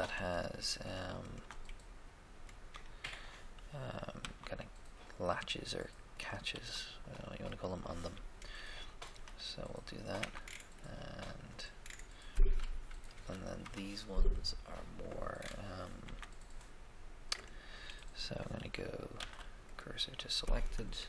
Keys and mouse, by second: 0.0 right click, 4.2 e, 6.6 e, 8.1-9.6 middle drag, 10.0 middle click, 10.2 Tab, 13.1 KP_1, 13.1 1, 13.6 KP_3, 13.6 3, 16.0 Tab, 16.0 Tab, 17.4 right click, 19.1 shift+s, 19.2 shift+s.